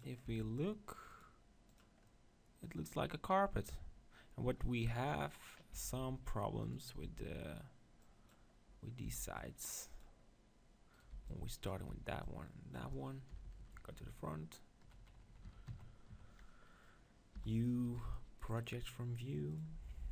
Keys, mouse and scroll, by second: 0.0-2.1 drag, 0.3 Tab, 2.1 middle click, 2.9-5.0 middle drag, 5.0 KP_7, 5.6-6.6 middle drag, 5.7 Tab, 6.0 z, 6.6-8.4 drag, 7.2 b, 9.3 b, 10.9-12.2 right drag, 11.1 b, 11.9 b, 13.3 KP_4, 13.5 KP_4, 14.8 KP_2, 15.0 KP_2, 17.4 u, 19.5 click.